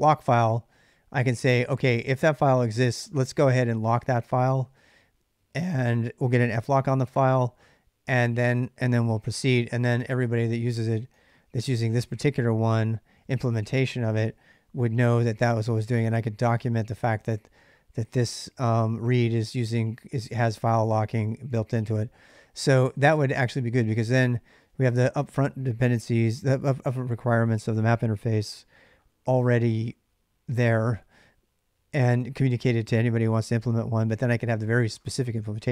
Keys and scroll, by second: 9.3-10.9 typing, 12.4-13.6 j, 15.0-25.0 typing, 33.3-35.7 typing.